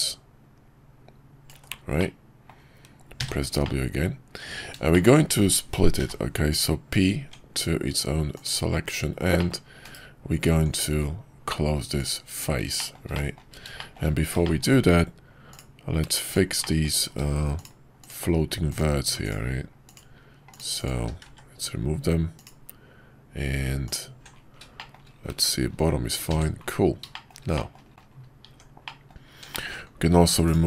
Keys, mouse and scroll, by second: 2.0 middle click, 3.2 w, 3.6-4.6 middle drag, 4.9 shift+middle click, 5.9 p, 7.2 Tab, 8.8 /, 9.3 middle click, 9.8 /, 10.5 Tab, 12.7 shift+middle click, 13.1 middle click, 13.7 shift+middle click, 14.4 shift+middle click, 16.6 middle click, 24.7 shift+middle click, 27.1 shift+middle click, 27.5 middle click, 27.9 middle click, 28.4 Tab, 28.8 middle click, 29.5 shift+middle click.